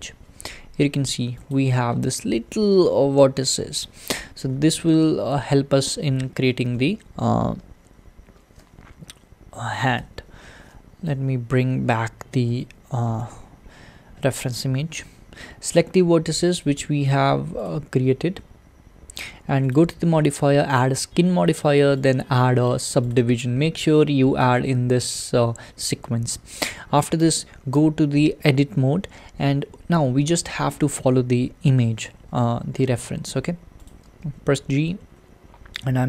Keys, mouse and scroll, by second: 0.8-1.5 scroll up 5, 1.5 click, 1.9-2.9 scroll up 5, 2.9-4.2 shift+middle drag, 4.2 `, 5.8-12.5 shift+middle drag, 12.5 alt+h, 13.9-14.3 scroll down 11, 16.6 click, 17.7 click, 20.8-26.6 drag, 26.6-27.3 scroll up 1, 27.3-27.8 scroll up 1, 27.8 Tab, 29.6-30.3 scroll down 2, 30.3-33.9 shift+middle drag, 33.9 click, 34.1 g.